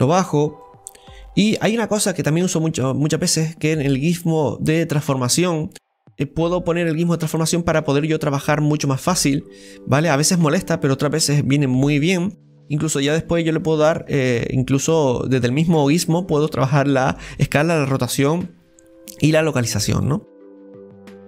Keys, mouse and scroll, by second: 0.1-4.2 drag, 4.3 click, 5.7 scroll down 1, 5.9-13.4 middle drag, 9.2 click, 14.4-19.3 middle drag, 19.7-21.2 middle drag.